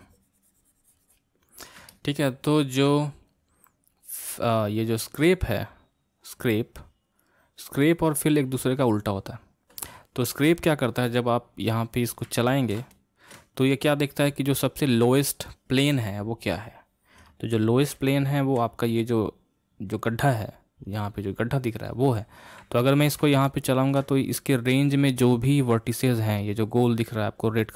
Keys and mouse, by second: 1.9-4.9 middle drag, 5.7-9.9 drag, 12.4-15.9 ctrl+middle drag, 16.6-21.0 middle drag, 22.8-26.4 middle drag.